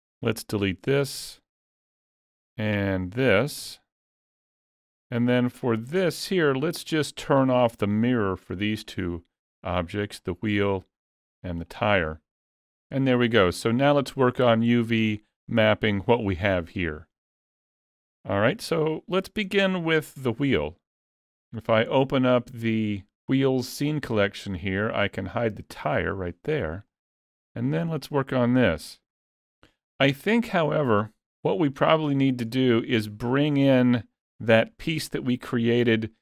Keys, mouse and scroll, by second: 2.8 click, 3.6 x, 4.8 middle click, 5.8 shift+middle click, 6.5 click, 6.9 shift+middle click, 7.4 middle click, 7.6-8.8 scroll up 1, 8.8 click, 10.3 click, 12.4 middle click, 13.2 z, 14.2 shift+middle click, 14.8 alt+a, 15.4 middle click, 16.0 shift+middle click, 16.7 click, 17.8 KP_Decimal, 18.9 click, 19.5-19.9 scroll down 3, 19.9 shift+middle click, 22.3 click, 25.9 click, 26.9 shift+middle click, 27.4-28.4 scroll up 3, 27.7 middle click, 30.0 middle click.